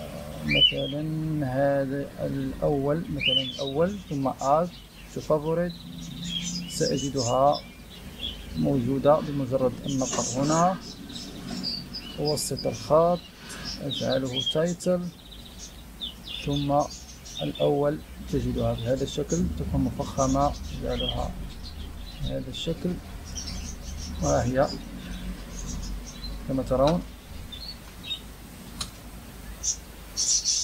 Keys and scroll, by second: 26.8 Return, 27.6 BackSpace, 28.7 Return.